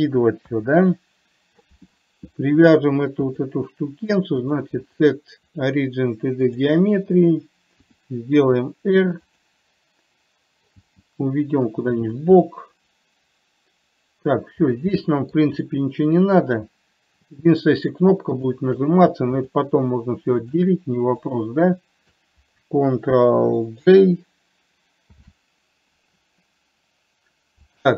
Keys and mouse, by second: 0.8 KP_3, 3.7 click, 4.8 click, 5.2-7.1 drag, 8.2 r, 11.1 g, 12.8-14.6 middle drag, 15.3-15.7 middle drag, 16.7 click, 18.7 shift+click, 19.9 shift+drag, 21.6 shift+click, 25.4 ctrl+j.